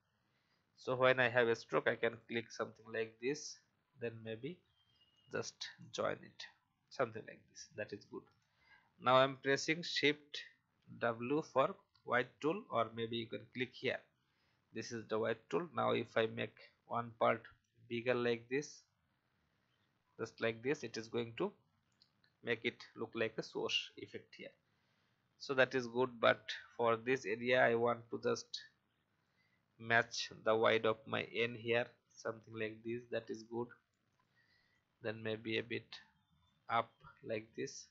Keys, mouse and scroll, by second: 2.1-4.1 drag, 8.0 Escape, 10.8 shift+w, 16.6-20.3 drag, 24.7-25.0 alt+scroll up 1, 27.9-29.5 drag, 32.5 alt+scroll down 1, 33.0 alt+a, 34.1 click, 37.3 alt+scroll down 1.